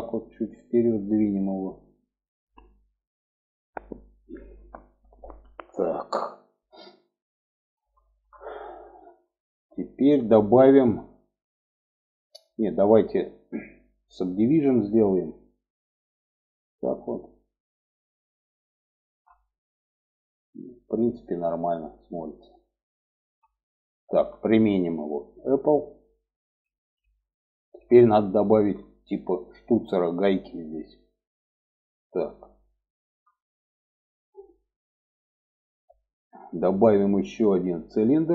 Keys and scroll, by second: 18.4 Tab, 22.3 Tab, 23.5 Tab.